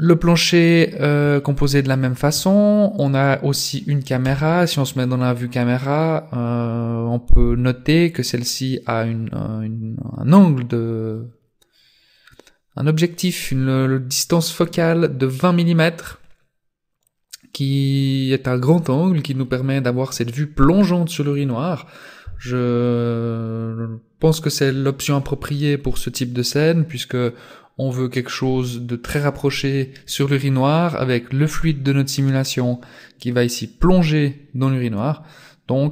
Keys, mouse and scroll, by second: 0.0 shift+middle click, 0.6 middle click, 1.4 shift+middle click, 3.0 right click, 4.2 KP_0, 5.3-5.6 scroll up 1, 9.8-10.1 scroll up 1.